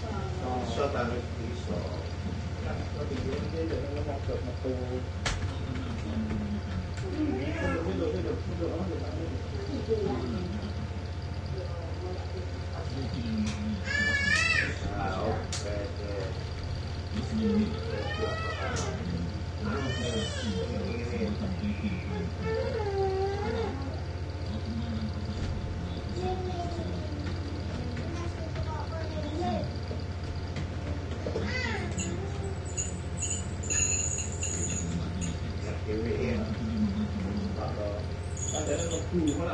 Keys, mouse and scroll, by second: 0.7 o, 2.7-7.6 typing, 8.9 click, 10.4-14.9 drag, 16.3 ctrl+d, 17.3 shift+Down, 18.8 Down, 20.5 F9, 22.9 F8, 25.5 shift+Home, 27.3-32.5 typing, 33.4 F1, 34.6 ctrl+d, 35.4 ctrl+shift+Down, 38.2 F8.